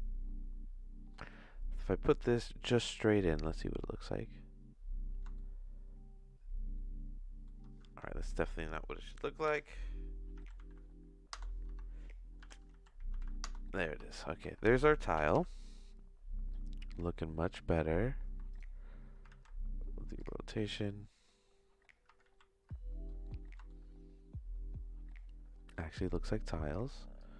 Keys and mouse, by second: 1.2 middle click, 2.4 click, 5.3-7.4 shift+middle drag, 7.8 Tab, 9.4 r, 11.6 Tab, 12.4 r, 14.0 Tab, 14.4 Tab, 15.3 n, 17.7 Tab, 18.2 Tab, 18.5 right click, 19.3 ctrl+a, 22.2 ctrl+z, 23.3 middle click, 23.6-25.7 shift+middle drag, 26.1 middle click, 26.5 click, 27.2 click.